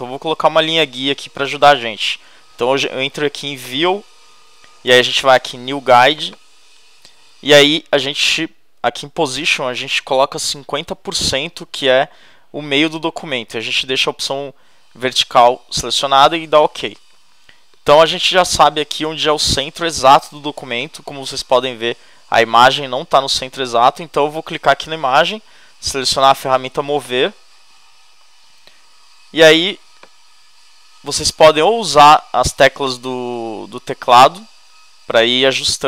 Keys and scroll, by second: 34.0 Right.